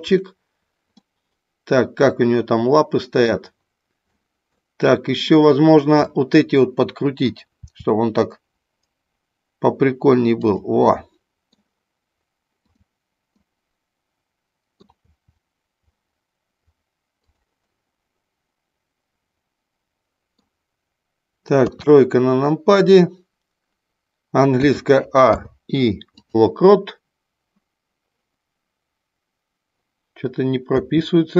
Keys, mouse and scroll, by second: 1.1-3.2 middle drag, 4.1 scroll up 1, 4.2 middle click, 5.1 click, 6.1-7.3 middle drag, 7.6 r, 10.5 click, 10.8 middle click, 12.6 click, 13.4-14.7 middle drag, 15.1 r, 17.4 click, 17.6-20.3 middle drag, 21.6 KP_3, 24.5 a, 25.2 i, 30.7 a.